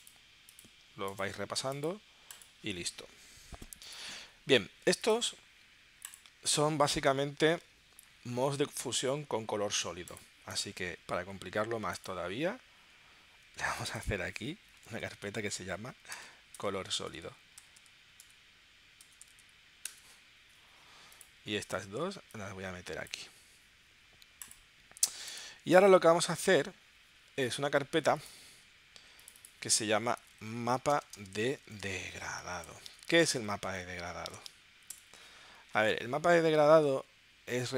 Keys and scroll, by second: 14.9-19.4 typing, 19.8 Return, 30.2-34.4 typing, 35.1 Return, 36.0 super+Tab.